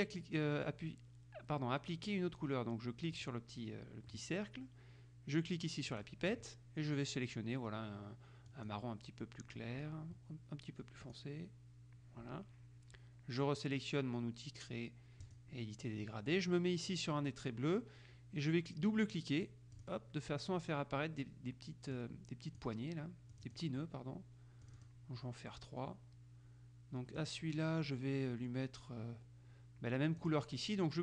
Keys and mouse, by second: 3.3 click, 6.1 click, 8.7 click, 11.2 click, 15.4 click, 19.6 click, 22.1-23.2 drag, 23.5 click, 24.8 click, 27.3 click, 30.3 click.